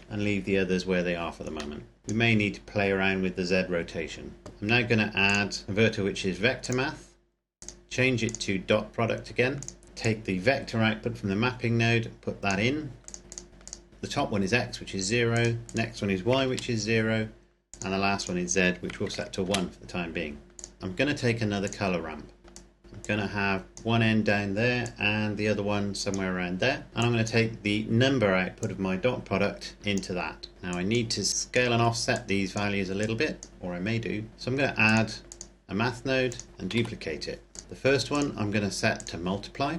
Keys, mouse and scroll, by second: 0.0 KP_Enter, 1.7 middle click, 2.0 click, 4.5 Delete, 5.1 click, 6.6 click, 10.2 click, 13.9 KP_0, 15.2 click, 16.3 KP_0, 17.6 click, 19.0 KP_1, 19.4 KP_Enter, 20.4 click, 20.8 shift+d, 21.5 click, 22.5 click, 23.0 click, 25.0 click, 28.8 click, 30.5 scroll down 1, 30.6 click, 33.5-34.3 scroll up 1, 34.8 click, 36.7 shift+d, 37.4 click, 37.6-38.0 scroll up 1, 38.0 click.